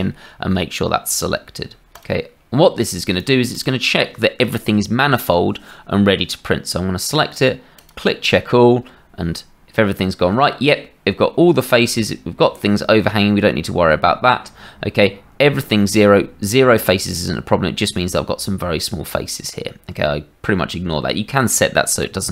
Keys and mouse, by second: 3.1 middle click, 3.5 middle click.